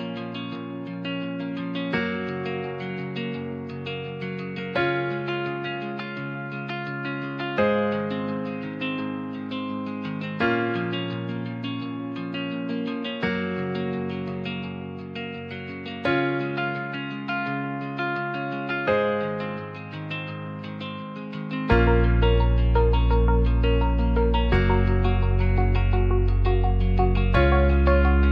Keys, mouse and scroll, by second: 1.5 c, 2.2 c, 5.3 Tab, 5.9 alt+z, 6.2 click, 7.1 Tab, 8.1 alt+z, 8.9 c, 9.4 click, 9.7 c, 10.8 c, 11.2 shift+middle click, 12.5 click, 14.6 Tab, 15.4 alt+z, 15.7 middle drag, 16.4 shift+middle drag, 16.7 middle drag, 17.2 ctrl+s, 17.7 shift+middle drag, 19.1 click, 19.7-21.1 shift+drag, 21.6 ctrl+s, 22.1 middle click, 23.3-24.6 shift+drag, 25.1 shift+middle drag, 25.4 middle drag, 25.9 middle click.